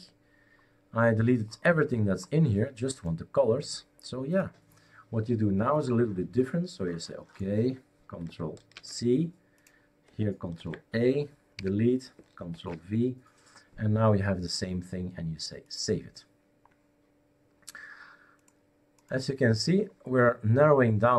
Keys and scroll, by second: 8.7 ctrl+c, 10.6 ctrl+a, 11.6 Delete, 12.5 ctrl+v.